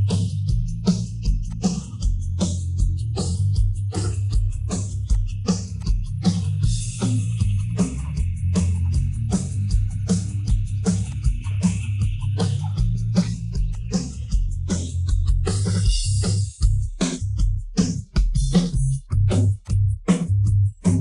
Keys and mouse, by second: 1.4 click, 2.6 shift+middle click, 5.1 click, 5.7-8.0 drag, 9.3 Tab, 11.0-12.2 drag, 13.1 Tab, 13.7 click, 14.5 Tab, 14.9-16.2 middle drag, 16.5-18.1 middle drag, 18.7-19.4 middle drag, 19.9-20.8 middle drag.